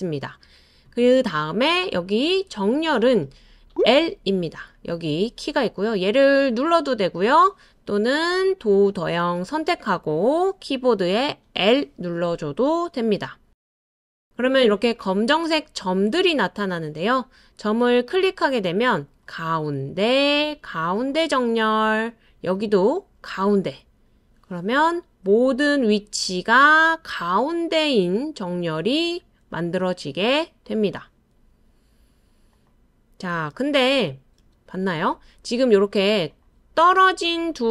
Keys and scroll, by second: 11.6 l, 33.5 super+z, 34.0 super+z, 34.4 super+z.